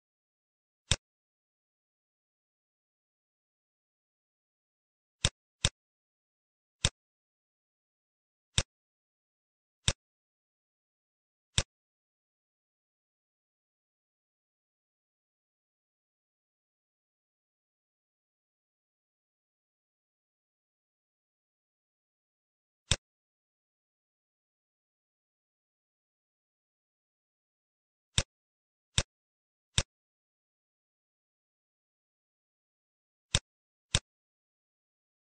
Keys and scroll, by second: 1.4 ctrl+a, 2.0-3.1 typing, 30.7 t.